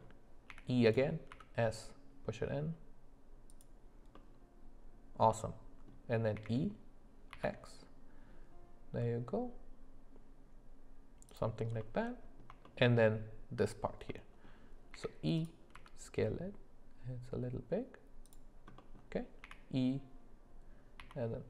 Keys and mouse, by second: 0.5 e, 4.2-5.9 middle drag, 6.4 e, 11.8 middle click, 12.6 shift+middle click, 14.1 middle click, 14.9 e, 18.8 middle click, 19.4 e.